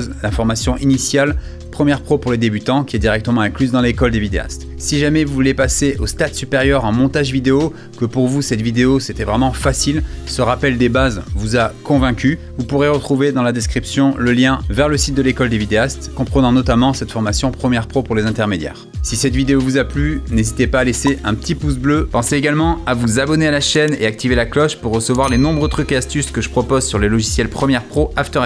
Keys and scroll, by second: 18.4 space.